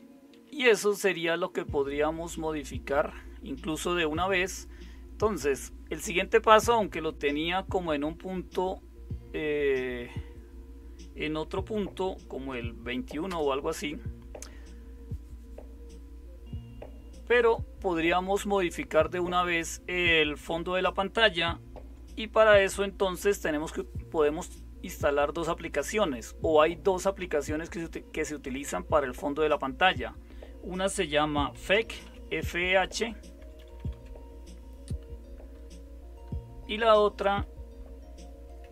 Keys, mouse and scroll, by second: 0.8 super+1, 1.2 super+2, 1.7 super+3, 13.2 super+Return, 31.3-32.5 typing, 33.4 Left, 33.6 Left, 33.7 Left, 33.9 Left, 36.8 Right, 37.8 Left, 38.6 Delete.